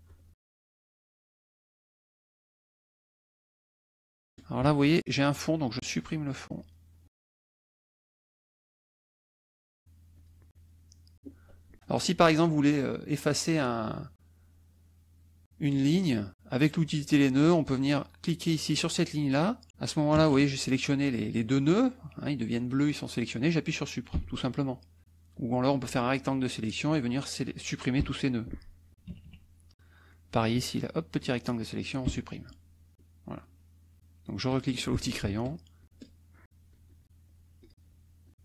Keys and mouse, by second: 0.9 ctrl+shift+z, 1.0 shift+click, 1.5 shift+click, 1.9 shift+click, 2.4 shift+click, 3.3 shift+click, 3.7 ctrl+shift+z, 3.8 ctrl+shift+click, 6.5 click, 9.5 shift+click, 10.1 shift+click, 10.5 shift+click, 11.1 shift+click, 16.7 click, 17.4 click, 18.2 click, 18.8 click, 20.1 KP_Add, 21.1 click, 22.2 click, 22.7 click, 24.1 Delete, 25.0 click, 25.7-27.3 drag, 28.0 Delete, 29.1 KP_Subtract, 29.8 click, 30.5 click, 32.0 Delete, 34.5 click, 35.8 shift+click, 36.4 ctrl+shift+click, 36.8 ctrl+shift+click, 37.6 shift+click, 38.2 shift+click.